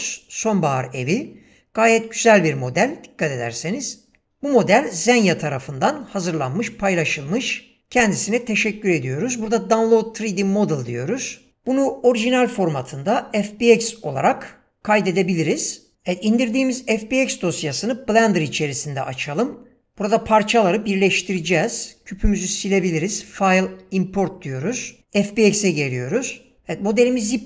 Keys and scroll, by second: 21.4 x.